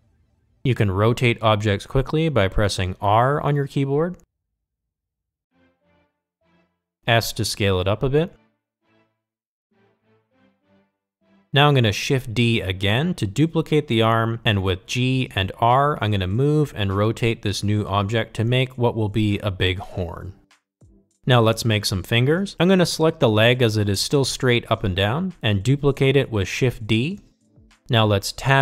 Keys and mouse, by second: 2.2 r, 6.2 g, 10.3 s, 11.3 g, 13.9 shift+d, 15.1 r, 16.1 g, 18.4 r, 19.0 g, 20.4 r, 21.1 g, 23.3 click, 25.6 shift+d.